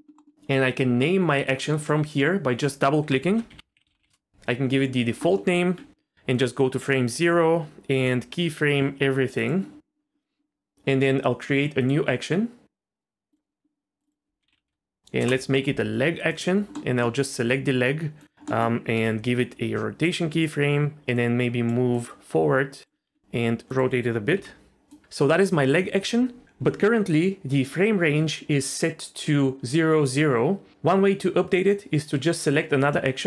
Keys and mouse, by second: 0.2 middle click, 1.9-4.1 drag, 5.2 middle click, 5.5 Tab, 6.3 click, 8.0 i, 11.9-13.4 drag, 14.1-15.2 drag, 16.7 middle click, 17.3 r, 18.5 middle click, 19.0 i, 21.3 click, 21.9-22.8 drag, 23.1 r, 23.7 click, 24.3 i, 32.8-33.2 drag.